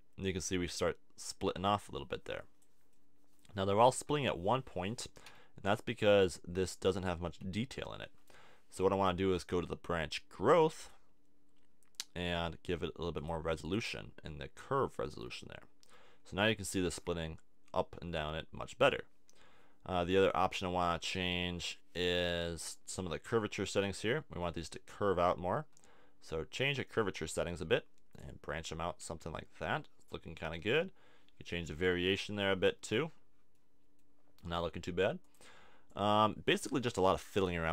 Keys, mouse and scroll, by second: 2.9 middle click, 5.2 z, 7.3 z, 10.4 click, 13.1-15.1 drag, 15.3-18.1 middle drag, 21.1-25.7 drag, 28.6 middle click, 32.5-33.5 middle drag.